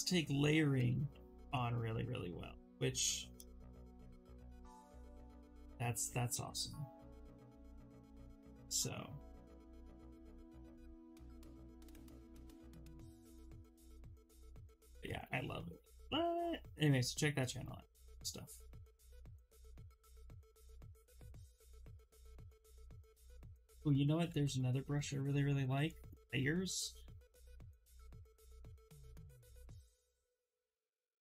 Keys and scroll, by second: 0.4 ctrl+z, 0.6 ctrl+z, 15.0 ctrl+z, 15.5 ctrl+z, 23.8 b, 24.4 l, 24.9 a.